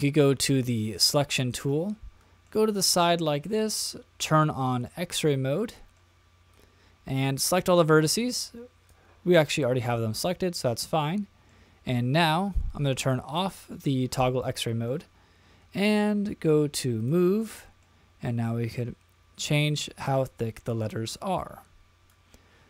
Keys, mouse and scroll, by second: 0.9 click, 1.6 middle click, 4.2 click, 4.8-6.0 middle drag, 6.5-9.4 drag, 9.4 middle click, 10.1-11.5 middle drag, 13.3 click, 14.5 middle click, 17.0 click, 17.5 middle click, 18.6-22.1 drag.